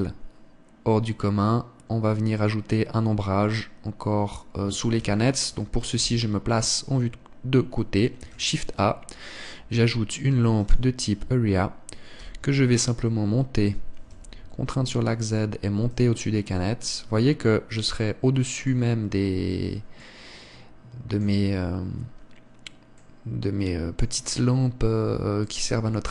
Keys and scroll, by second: 5.9 Escape, 6.8 KP_3, 9.1 shift+a, 13.1 g.